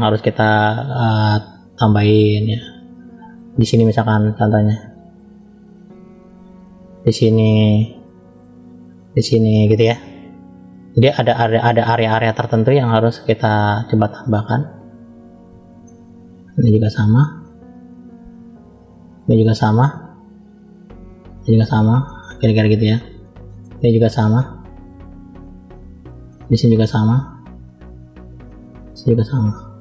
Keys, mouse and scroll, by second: 1.5 click, 3.4 middle click, 5.3 click, 7.4 click, 8.9 click, 9.8-11.3 middle drag, 12.3 click, 13.5 middle click, 14.7 click, 15.2 click, 15.8 middle click, 17.4 click, 18.8 middle click, 19.7 click, 21.2 click, 23.1 middle click, 24.1 click, 26.1 middle click, 27.2 click, 28.7 click.